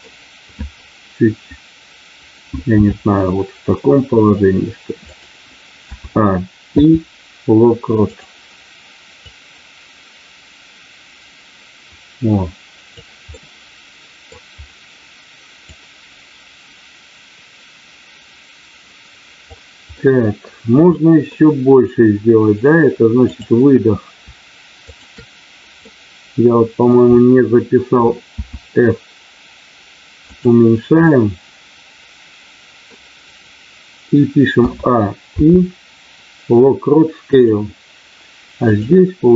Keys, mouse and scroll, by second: 2.6 r, 5.0 click, 6.7 i, 9.2-12.9 drag, 13.4 middle click, 15.7-19.5 drag, 19.9 middle click, 20.9 middle click, 23.2 click, 24.8 shift+click, 25.8-26.9 middle drag, 30.3 click, 31.0-32.9 middle drag, 35.3 i, 38.5 click.